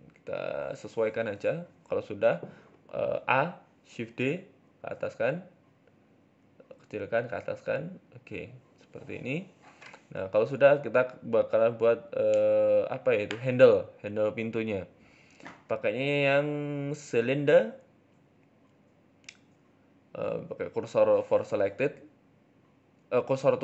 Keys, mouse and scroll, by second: 1.4 middle click, 2.0-4.4 typing, 2.5-3.0 scroll up 4, 5.5 s, 6.6 g, 8.1 g, 9.0 Tab, 9.2 middle click, 9.5 scroll down 5, 9.7 middle click, 10.0 middle click, 10.3-10.6 scroll down 2, 10.4 middle click, 11.2-11.9 scroll up 4, 11.6 KP_7, 13.1 Tab, 13.4 scroll up 3, 13.6 shift+middle click, 14.6 shift+a, 16.9-17.7 scroll down 5, 17.2 KP_1, 17.7 ctrl+z, 18.0 Tab, 18.1-18.8 scroll down 4, 18.2-18.8 scroll up 1, 18.8-19.7 scroll up 1, 19.7 scroll up 1, 19.7 shift+s, 20.9 shift+a.